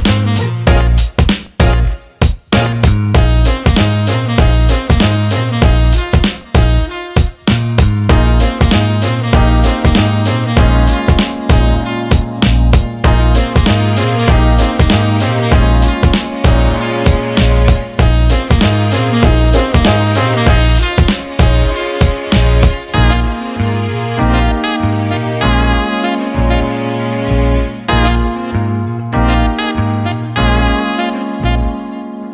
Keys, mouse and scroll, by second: 2.0 click, 3.9 click, 5.2 click, 9.4-11.3 alt+middle drag, 11.6-12.0 scroll up 1, 12.2 alt+middle click, 12.8 click, 14.8 click, 16.8 click, 17.5-18.8 middle drag, 19.2-19.5 middle drag, 20.0-21.0 middle drag, 22.7 middle click, 23.5 middle click, 24.5-25.3 middle drag, 25.7 middle click, 26.0 middle click, 29.3 middle click, 30.5 middle click.